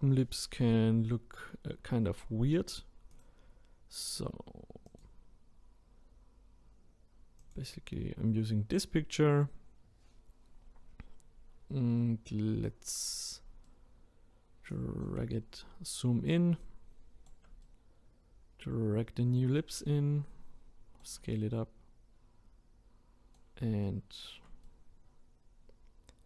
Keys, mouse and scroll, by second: 13.6-15.4 shift+right drag, 15.4 scroll up 2, 16.6-26.2 shift+right drag.